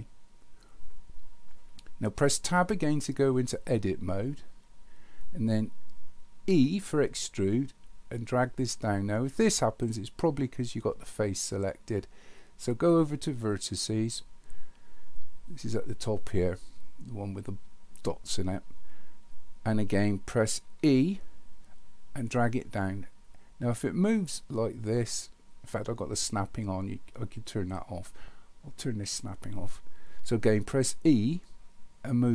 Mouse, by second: 13.5 click, 29.1 click.